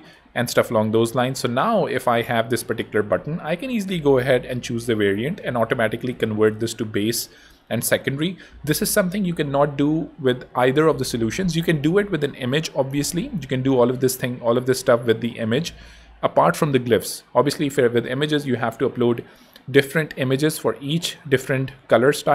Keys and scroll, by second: 0.7 ⟲.